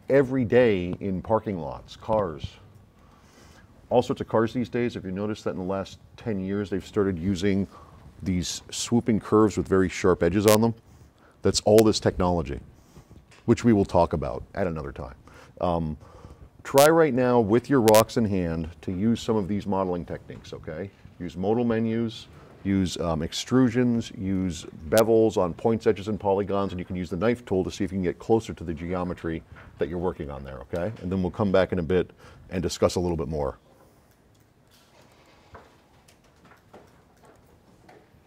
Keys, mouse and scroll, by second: 2.8 right click, 16.3-16.6 drag, 35.1 click.